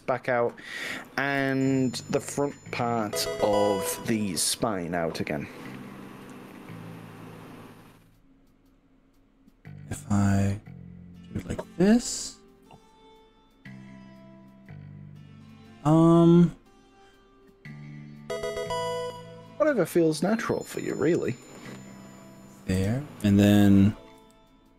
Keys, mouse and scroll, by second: 1.5 y, 4.9-5.5 scroll up 4, 5.9-6.3 scroll down 5, 9.7 scroll down 1, 20.3 click, 22.9 click, 24.2 g.